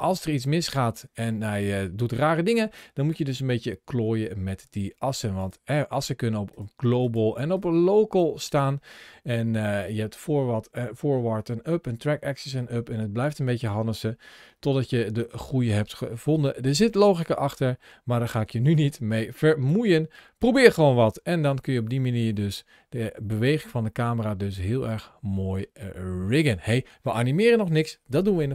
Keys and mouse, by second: 5.3-6.9 drag, 7.4-8.5 drag, 19.5-26.3 drag.